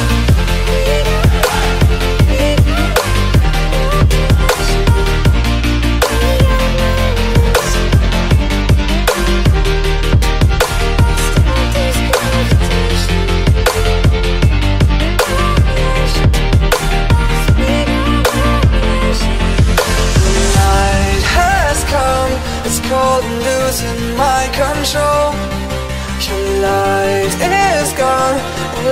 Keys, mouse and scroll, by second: 2.0 click, 3.0 click, 4.6 click, 5.3 click, 10.1 click, 11.1 click, 15.2 click, 15.6 click, 18.7 click, 19.8 click, 21.9 click, 23.2 click, 23.6 click, 26.4 click, 27.6 click, 28.5-28.9 click.